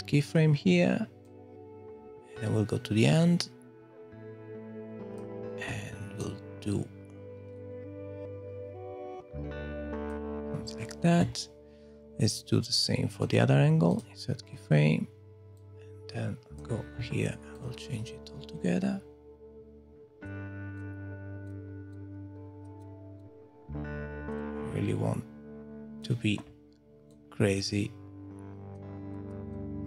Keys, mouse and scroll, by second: 1.2 click, 6.2 click, 13.2 right click, 15.6 click, 17.6 click, 20.7 click, 21.4 click, 21.9 click, 22.8 click, 23.2 click, 24.4 click, 27.1 click, 29.1 click, 29.5 click.